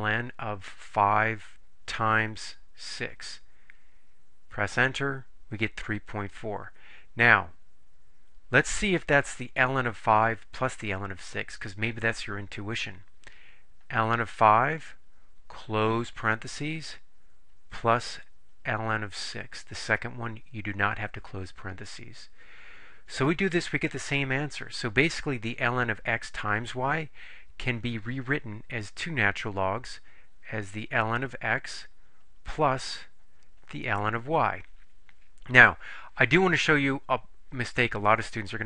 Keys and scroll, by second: 1.1 5, 3.0 6, 3.9 Return, 14.7 5, 16.3 ), 19.6 6, 21.9 Return.